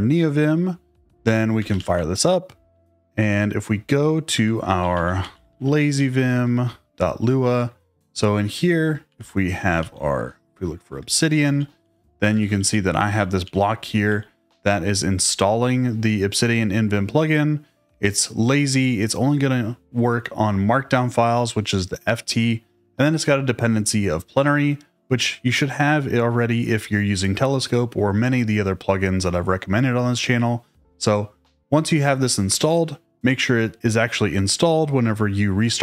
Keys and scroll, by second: 1.3-2.3 typing, 4.4-6.0 typing, 6.3 shift+Return, 8.5-10.0 typing, 10.6 Tab, 10.8 Return, 11.8 k.